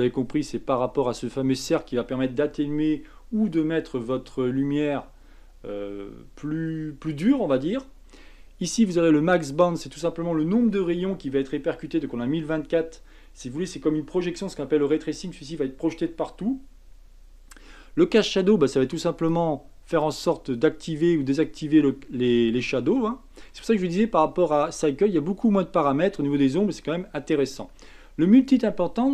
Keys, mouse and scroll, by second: 0.2-0.6 scroll down 5, 19.1 click, 19.9 click, 22.6 click, 23.9 middle click, 23.9-24.4 scroll up 4.